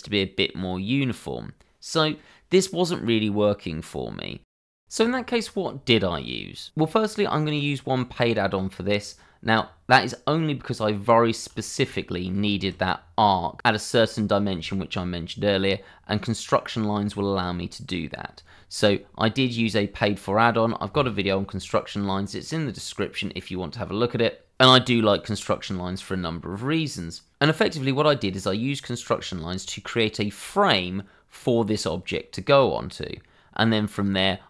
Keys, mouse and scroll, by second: 0.7 shift+click, 1.3 click, 1.7-2.2 scroll down 1, 2.6 shift+middle click, 2.9 shift+scroll down 1, 3.1 middle click, 4.3 shift+middle click, 11.6 shift+middle click, 12.0 middle click, 12.5 shift+middle click, 12.8-13.9 scroll up 1, 15.0 click, 15.6-17.1 scroll down 1, 17.2 shift+middle click.